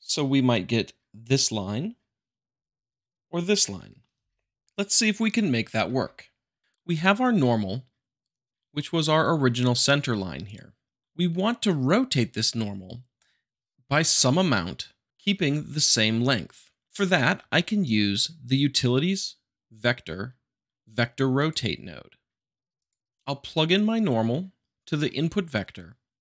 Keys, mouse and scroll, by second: 1.2-2.3 drag, 2.7 click, 6.6 click, 10.4 click, 17.0 click, 17.3 shift+a, 21.3-22.4 drag, 22.7 click, 23.1-24.1 drag.